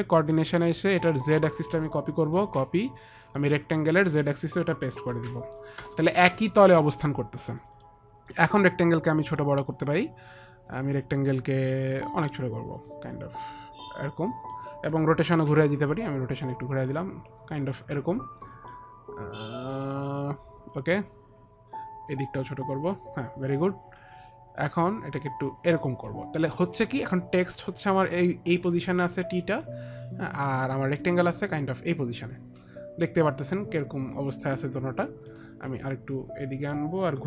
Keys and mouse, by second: 1.6 click, 2.7 ctrl+c, 2.7 click, 4.7 ctrl+c, 4.7 click, 5.4 ctrl+v, 5.4 ctrl+c, 5.4 click, 5.8 ctrl+v, 5.8 ctrl+c, 6.2 Return, 8.0 click, 12.6 click, 15.8 r, 16.9 click, 20.4 click, 22.0 click, 24.3 e, 25.5 click, 27.3 click, 27.3 e, 29.2 alt+click, 34.5 alt+click, 36.5 alt+click.